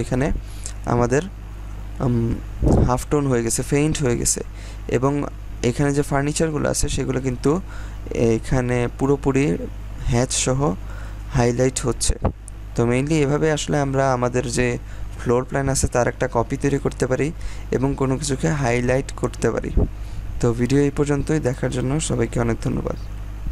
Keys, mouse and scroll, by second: 0.7-1.3 scroll up 1, 2.7-3.2 scroll down 1, 3.2-6.2 scroll up 1, 6.2 scroll down 1, 7.6-8.3 scroll up 1, 10.0-11.3 scroll down 1, 11.4-12.0 scroll up 1, 12.0-12.7 scroll down 1, 12.7-13.2 scroll up 1, 13.2-13.6 scroll down 1, 13.6-15.5 scroll up 1, 17.2 scroll up 1, 17.9-19.0 scroll down 1.